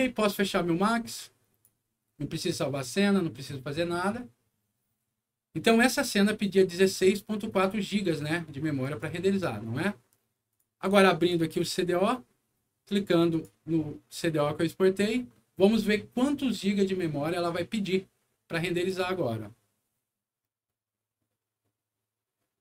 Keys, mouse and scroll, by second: 0.7 click, 8.8 click, 10.4 click, 11.1 click, 11.3 click, 13.0 click, 13.2 click.